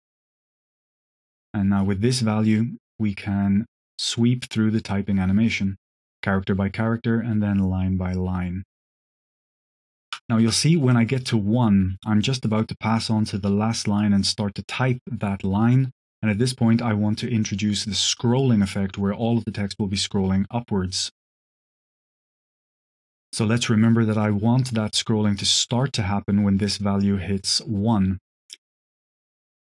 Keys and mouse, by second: 2.2-9.9 shift+drag, 10.8 middle click, 15.3 middle click, 21.5 click, 22.2 click, 27.8-28.1 drag, 28.8 drag, 29.3 click.